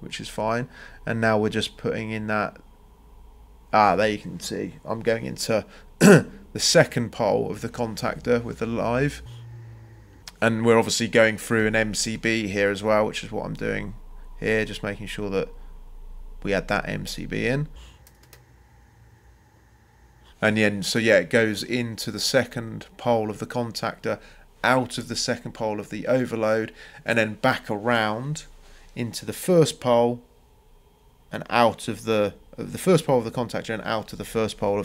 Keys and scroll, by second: 0.3 Escape, 6.2 space, 16.5 Escape, 19.7 c, 25.1 Escape, 34.0 Escape.